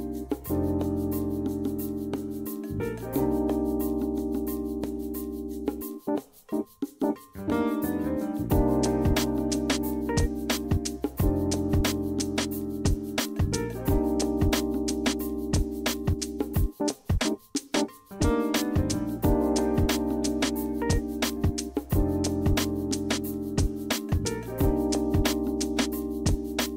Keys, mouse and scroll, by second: 1.1 s, 1.9 w, 5.3 click, 5.8 click, 6.2-10.8 middle drag, 11.3 d, 13.3 a, 14.5 d, 17.8 a, 19.2 d, 20.5-25.3 typing.